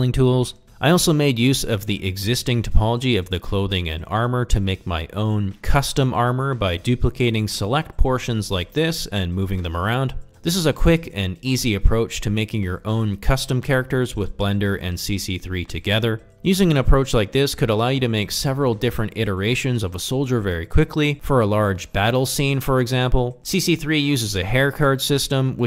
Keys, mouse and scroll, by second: 0.1 alt+z, 0.2 g, 0.8 click, 0.9 s, 1.4 click, 1.5 click, 1.6 Tab, 2.0 alt+z, 2.1 middle click, 2.2 ctrl+drag, 2.5 click, 2.7-3.9 typing, 3.3 middle click, 4.0 middle click, 4.3 ctrl+middle drag, 4.6 shift+click, 5.0 shift+d, 5.2 z, 5.4 click, 5.6 r, 5.7 y, 6.2 click, 6.4 shift+middle click, 6.8 g, 7.2 r, 7.3 click, 7.4 s, 8.3 g, 8.9 click, 9.2 shift+middle click, 9.6 ctrl+Tab, 9.8 f, 10.1 g, 10.1 click, 10.3 click, 10.5 f, 10.8 click, 10.9 click, 11.0 click, 11.2 click, 11.6 click, 11.7 click, 11.9 click, 12.1 click, 12.4 f, 13.0 ctrl+Tab, 13.2 middle click, 13.6 middle click, 13.7 shift+middle click, 13.8 middle click, 14.5 shift+d, 15.3 x, 15.5 click, 15.6 s, 15.9 click, 16.1 middle click, 16.2 g, 16.5 middle click, 16.8 ctrl+middle click, 17.1 shift+middle click, 17.4 g, 17.5 click, 17.8 middle click, 18.2 ctrl+z, 19.0 alt+z, 19.3 click, 19.8 g, 20.0 y, 20.2 click, 20.4 middle click, 20.6 Tab, 21.0 middle click, 21.2 ctrl+click, 21.5 shift+middle click, 21.8 ctrl+middle click, 21.9 shift+middle click, 22.1 middle click, 22.6 shift+middle drag, 23.9 click, 24.1 middle click, 24.2 Tab, 24.6-25.6 typing, 25.0 click, 25.4 middle click.